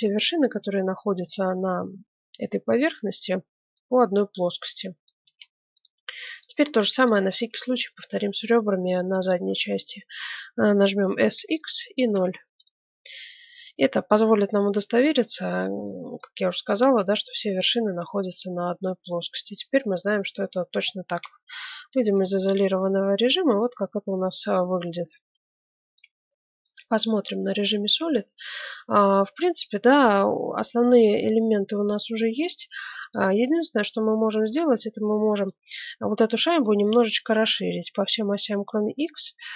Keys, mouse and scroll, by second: 4.3-6.1 middle drag, 5.2 ctrl+Tab, 6.3-8.9 right drag, 11.0 s, 13.0-14.9 middle drag, 15.8-17.5 middle drag, 18.4-20.2 middle drag, 21.2 KP_Divide, 21.6-23.8 middle drag, 22.0 Tab, 26.0 z, 26.6-28.6 middle drag, 30.8-33.0 middle drag, 33.0-34.5 right drag, 33.9 middle click, 35.1-39.5 middle drag.